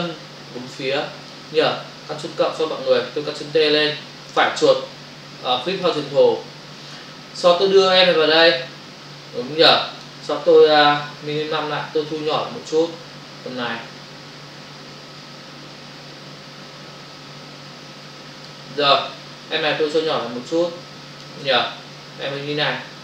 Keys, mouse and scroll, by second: 4.2 right click, 5.7 click, 7.6 click, 12.1 shift+click, 20.2 shift+click, 21.9 click.